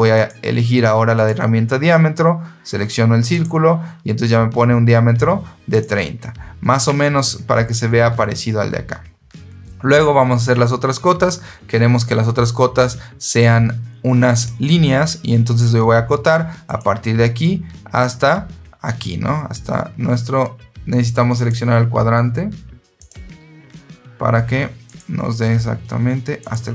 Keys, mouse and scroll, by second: 0.0 click, 1.1 click, 3.2 click, 5.6 click, 13.2 click, 14.3 click, 16.6 click, 21.3 click, 22.9 click, 24.8 click, 26.3 click.